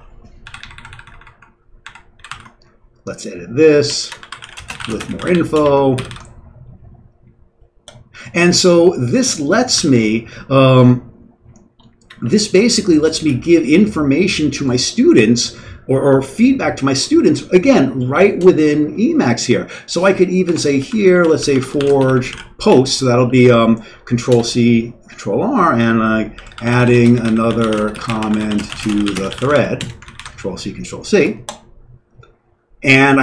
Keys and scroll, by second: 0.0 Return, 0.0 typing, 0.5 ctrl+n, 0.6 ctrl+n, 0.7 ctrl+n, 0.9 ctrl+n, 2.0-6.1 typing, 9.8 q, 12.2 Page_Down, 12.7 Down, 12.7-13.0 Down, 13.3 Down, 18.4 Return, 20.4 Escape, 20.8-24.1 typing, 24.3 Return, 26.1-30.4 typing, 30.0 ctrl+c, 30.1 ctrl+c, 31.7-32.5 typing.